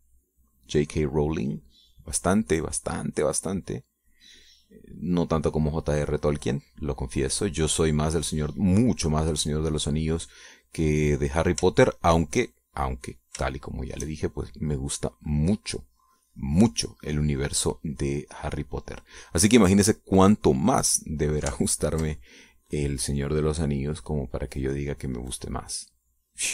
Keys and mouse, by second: 0.3-9.3 shift+drag, 9.6-13.6 drag, 13.9 shift+click, 14.5-20.7 shift+drag, 22.8 ctrl+click, 24.3-26.5 drag.